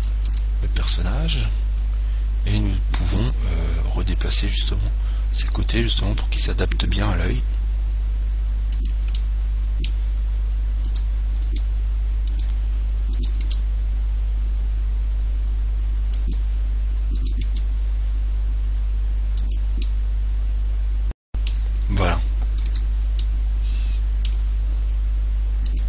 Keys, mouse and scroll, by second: 0.5 Tab, 1.2-3.4 middle drag, 3.4 right click, 4.8 g, 9.2 click, 9.6-11.3 middle drag, 11.1 right click, 11.7 g, 12.6-14.3 drag, 13.4 right click, 13.7 g, 16.8 click, 17.4 right click, 17.4 g, 20.1 click, 21.7 middle click, 22.0-25.1 middle drag, 22.8 Tab.